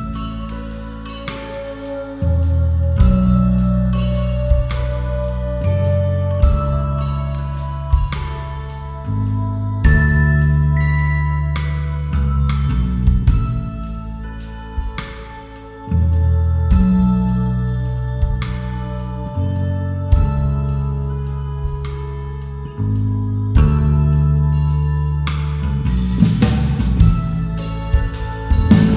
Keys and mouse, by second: 1.3-3.0 drag, 4.2 click, 6.2 KP_1, 7.5 g, 11.4 click, 14.4 click, 17.4 g, 18.6 click, 20.2-23.1 drag, 27.1 Tab, 28.8 Tab.